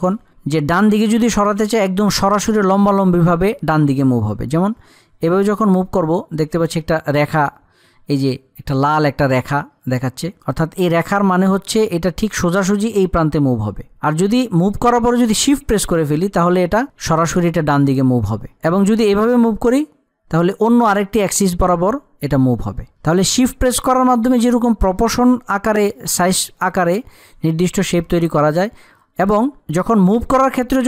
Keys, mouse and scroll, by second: 4.9-13.8 drag, 29.2 click.